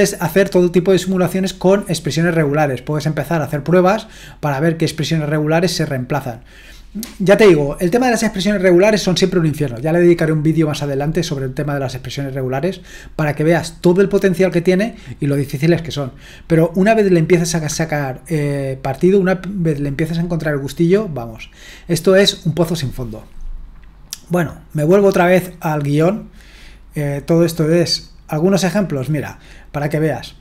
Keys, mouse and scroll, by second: 25.6-26.6 drag, 26.6-28.0 scroll down 1, 28.0-29.5 scroll down 1, 29.5-30.4 scroll down 1.